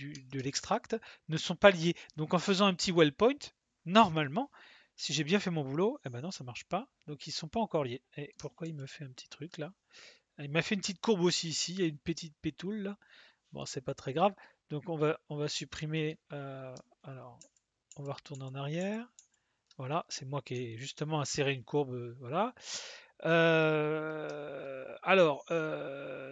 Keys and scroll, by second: 8.6 ctrl+z, 17.4 ctrl+z, 17.9 ctrl+z, 18.3 ctrl+z, 18.7 ctrl+z, 19.1 ctrl+z.